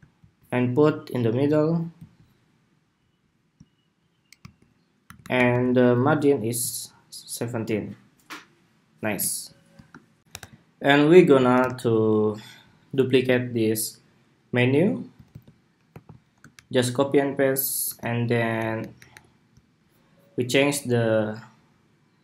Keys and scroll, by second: 4.1 alt+Right, 4.8 alt+Right, 4.9 alt+Right, 5.1 alt+Right, 5.2 alt+Right, 6.5 alt+Right, 9.9 shift+super+2, 10.2 super+=, 11.3 super+-, 15.0 super+c, 15.6 super+v, 18.2 alt+Up, 18.5 alt+Up, 18.7 alt+Up, 18.8 alt+Up, 20.1 alt+Up.